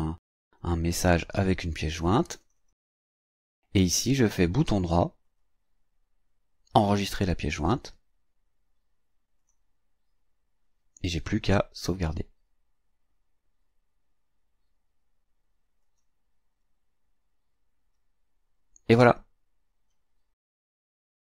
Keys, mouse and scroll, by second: 2.4 click, 5.3 right click, 9.4 click, 15.8 click.